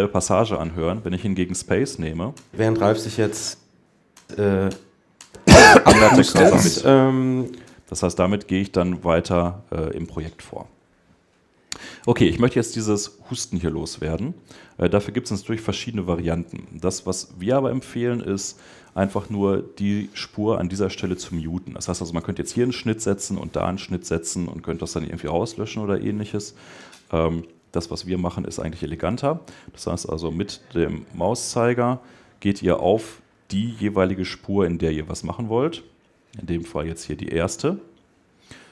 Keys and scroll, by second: 37.7 Escape.